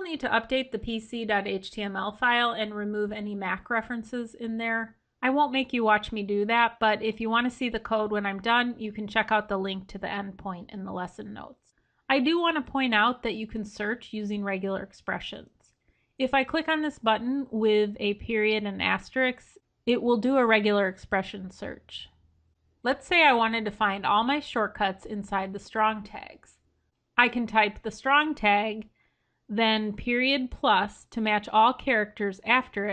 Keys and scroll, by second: 15.3 ctrl+f.